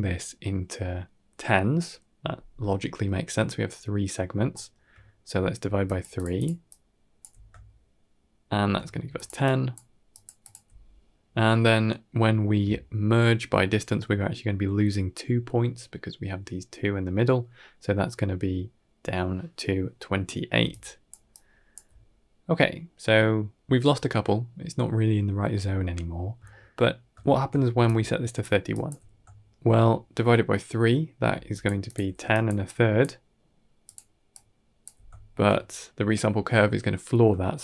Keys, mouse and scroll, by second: 4.4 shift+middle click, 5.4-7.1 typing, 5.7 click, 6.0 click, 6.2 click, 6.5 click, 7.5-8.4 shift+middle drag, 8.9-10.4 typing, 9.0 click, 9.3 click, 10.3 click, 17.4 middle click, 20.5-21.6 typing, 20.6 click, 21.2 click, 23.1 d, 26.3 shift+middle click, 27.1 shift+middle click, 27.6-28.8 typing, 27.7 click, 28.6 click, 29.2 shift+middle click, 31.2-34.8 typing, 31.4 click, 31.7 click, 32.2 click, 32.5 click, 33.7 click, 34.2 click, 35.0 shift+middle click, 37.3 shift+middle click.